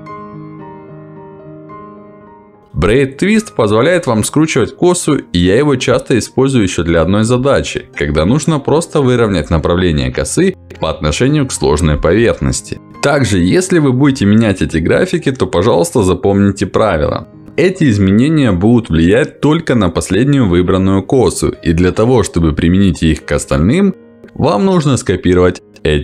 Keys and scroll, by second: 3.2 Escape, 15.7 Escape.